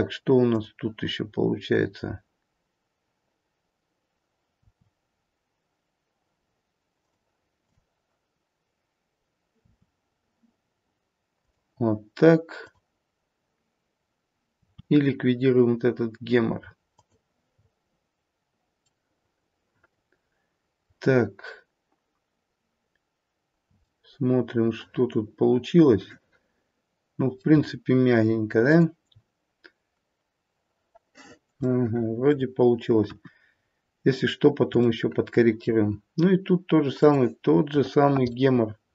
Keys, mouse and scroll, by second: 0.3 click, 4.6 r, 9.4 r, 12.5 click, 14.4 r, 17.5-18.9 scroll down 1, 18.9 middle click, 18.9-19.9 scroll down 4, 19.9 middle click, 20.4 middle click, 23.4 scroll up 1, 23.8 middle click, 24.8 middle click, 25.1 middle click, 27.5-28.6 scroll down 2, 28.6 click, 31.5 shift+middle click, 33.0 KP_1, 33.4-34.6 scroll up 1, 34.8 shift+middle click, 34.8-35.2 scroll up 3, 35.5 shift+middle click, 36.1-36.9 scroll up 1, 36.9 click.